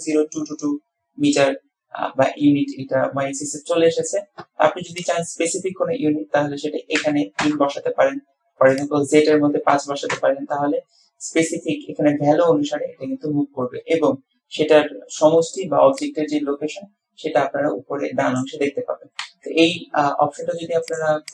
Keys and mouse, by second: 5.2-8.0 drag, 9.0-11.0 drag, 21.1 click.